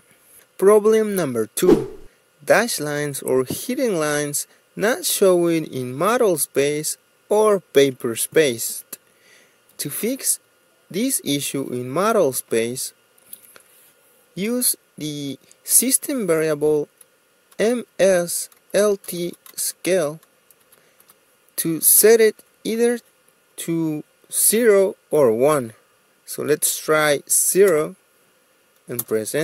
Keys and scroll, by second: 18.7-21.7 typing, 22.2 Return, 28.8 0.